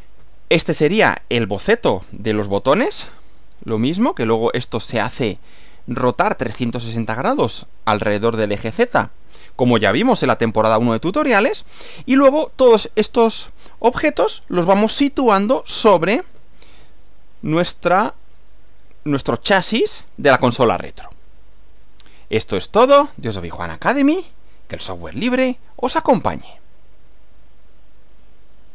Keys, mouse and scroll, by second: 0.2 Right, 16.3 Left, 27.1 click, 28.1 click.